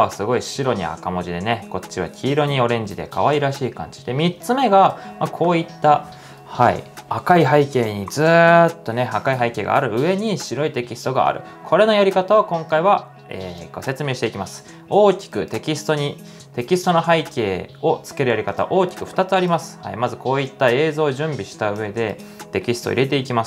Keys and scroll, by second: 15.8-16.2 typing.